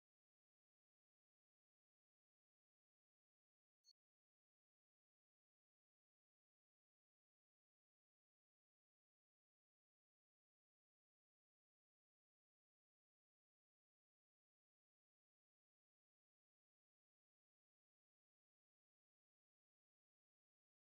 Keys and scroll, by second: 10.6 space, 14.2 space, 19.0 space.